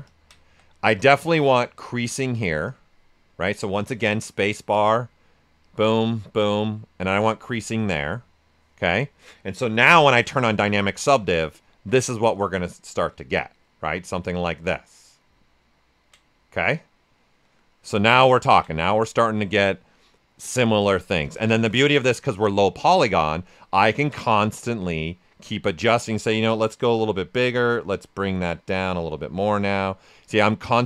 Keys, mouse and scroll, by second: 0.4 q, 1.8 space, 5.6 click, 9.8 d, 10.5 shift+f, 11.0 ctrl+right click, 15.2 typing, 15.4 ctrl+right click, 18.0 ctrl+right click, 21.1 shift+f, 21.3 right click, 23.5 ctrl+click, 24.7 w, 25.8-29.7 drag, 29.7 right click, 30.2 ctrl+click.